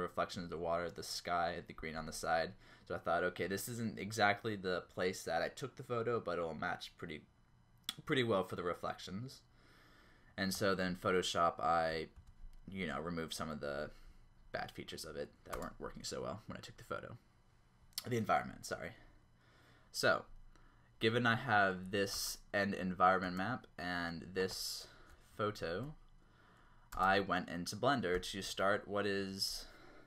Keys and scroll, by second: 12.2 Up, 15.6 space, 22.2 space, 23.2 space, 25.2 Down, 26.9 space.